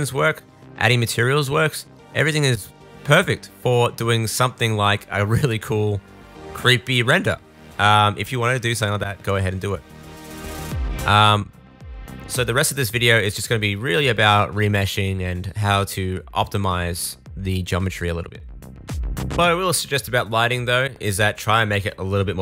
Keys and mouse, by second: 3.1-5.3 middle drag, 5.3-9.4 drag, 6.0 g, 7.5 g, 9.4 middle click, 9.5-22.4 drag, 10.4 shift+d, 12.1 g, 17.4 middle click, 17.4 right click.